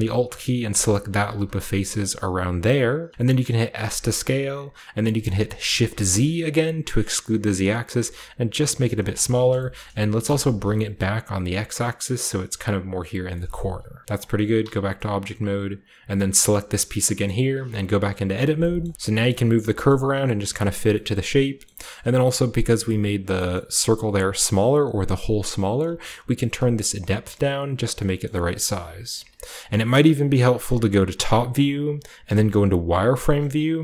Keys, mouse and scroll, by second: 0.7 alt+right click, 1.3 z, 2.4 z, 3.1-3.5 scroll down 1, 3.5 scroll up 1, 3.8 s, 5.7 shift+z, 8.9 click, 9.5 shift+click, 9.7 shift+click, 9.7-11.9 shift+scroll up 1, 9.7 shift+middle click, 10.2 g, 10.9-12.6 shift+middle drag, 11.9-13.0 drag, 12.1-13.0 scroll up 1, 13.0 scroll down 1, 13.3 shift+middle click, 13.9 g, 14.0 g, 14.5 Tab, 16.1 click, 17.5 Tab, 18.9 g, 19.0-21.6 drag, 19.6-21.6 scroll up 1, 19.9 g, 20.4 shift+middle click, 20.7 shift+middle click, 21.6 shift+middle click, 21.9-23.3 shift+middle drag, 23.5-24.3 shift+scroll up 1, 23.5 shift+middle click, 24.3-25.1 shift+scroll up 1, 24.4-25.6 shift+middle drag, 26.1-28.2 shift+drag, 29.1 KP_4, 30.8 KP_7, 32.2 z, 32.4 click, 33.3 g.